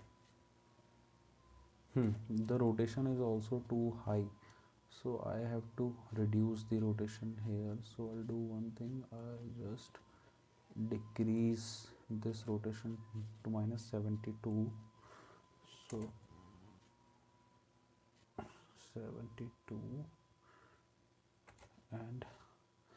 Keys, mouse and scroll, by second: 2.1 space, 16.0 space, 21.5 space.